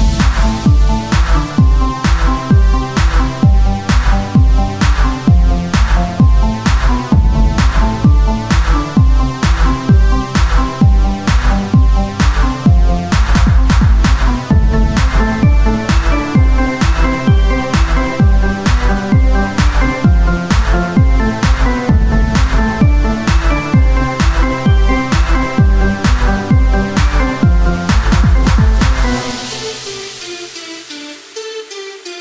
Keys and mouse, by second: 8.0-13.9 drag, 13.7 t, 14.9-16.1 drag, 18.0 KP_1, 18.4 z, 20.2 z, 20.4 Tab, 22.4 z, 22.8 z, 23.3 s, 26.4 z, 26.9 z, 27.4 g, 29.6 g, 31.3 ctrl+Tab.